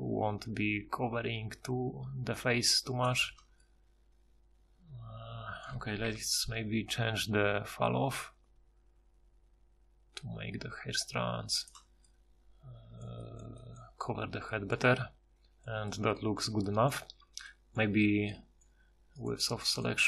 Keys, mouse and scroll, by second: 6.1 F6, 12.2-13.4 middle drag, 17.2 Tab.